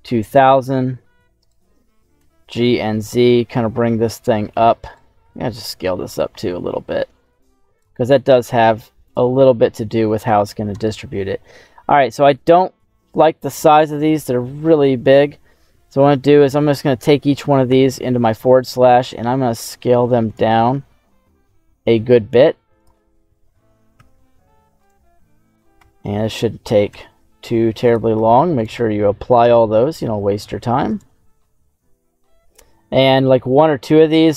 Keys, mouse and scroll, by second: 1.3 right click, 2.1 g, 2.5 z, 4.8 right click, 5.1 s, 7.7 click, 8.4 ctrl+a, 10.8-12.3 middle drag, 13.2 scroll up 2, 15.0 right click, 17.6 /, 18.8 s, 20.2 click, 22.0 ctrl+a, 23.9 /, 24.7 right click, 25.7 /, 26.8 s, 27.8 click, 28.1 ctrl+a, 29.4 /, 30.8 right click, 33.4 /.